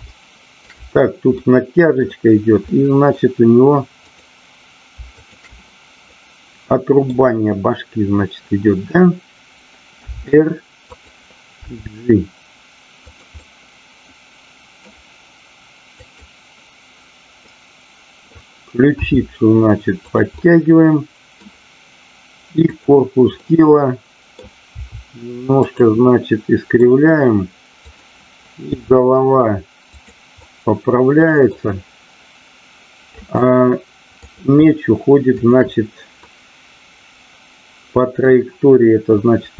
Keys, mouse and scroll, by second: 0.1 shift+middle click, 1.4 middle click, 2.7 middle click, 5.1 shift+click, 6.1-7.3 middle drag, 9.9 r, 10.9 click, 11.6 g, 13.1 click, 13.4-14.8 middle drag, 15.9 click, 17.4 middle click, 18.9 r, 20.3-21.4 middle drag, 22.5 click, 23.5 middle click, 24.6 r, 26.1-26.8 middle drag, 27.9 click, 28.8 r, 29.9 click, 30.4-31.6 middle drag, 33.2 middle click, 35.3 shift+click, 36.2-38.3 middle drag.